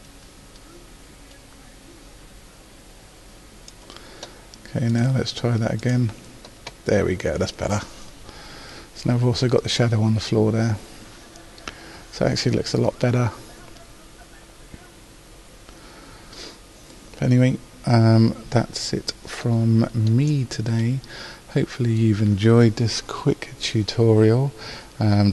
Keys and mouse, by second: 0.2 middle click, 1.0 middle click, 5.0 click.